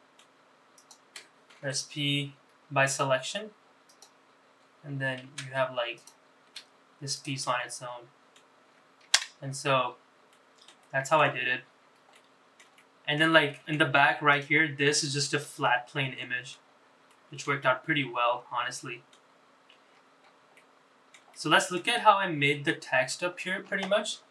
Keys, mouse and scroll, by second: 0.0 middle click, 0.8 shift+click, 1.6 p, 5.4 Tab, 6.0 click, 6.5 g, 7.4 middle click, 10.3 middle click, 10.8 shift+middle click, 11.5-12.0 scroll up 4, 12.2 shift+middle click, 12.8 middle click, 13.4 shift+middle click, 14.3 click, 15.0 middle click, 15.6 shift+middle click, 17.2 shift+middle click, 17.6-19.2 middle drag, 19.4-19.7 scroll down 3, 20.0-20.4 scroll up 4, 20.6 shift+middle click, 21.4 middle click.